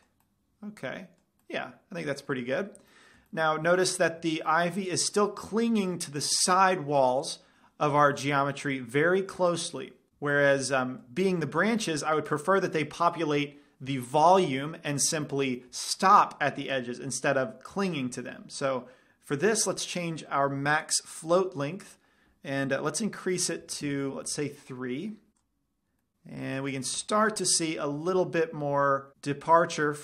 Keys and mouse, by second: 5.2-6.7 middle drag, 8.4-10.1 middle drag, 10.6-12.2 middle drag, 15.5 middle drag, 15.7-18.6 middle drag, 19.6-21.6 drag, 25.9-26.4 drag, 26.2 middle click, 27.6 middle click, 27.8-28.2 middle drag.